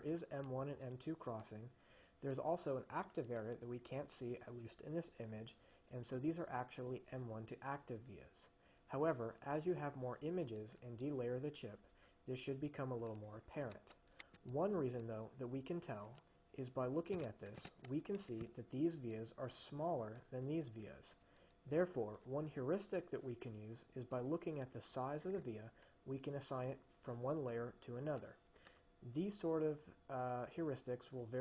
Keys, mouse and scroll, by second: 17.3-18.3 drag.